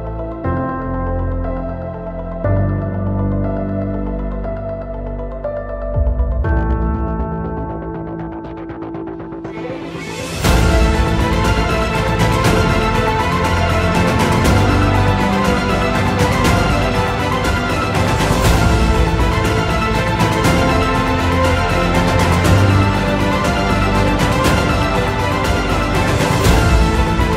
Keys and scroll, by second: 5.9 5, 6.2 Return, 11.3 8, 11.4 Return, 14.0 space, 14.6 Delete, 21.2 c, 21.7 Escape, 22.7 shift+Page_Down, 23.2 alt+c.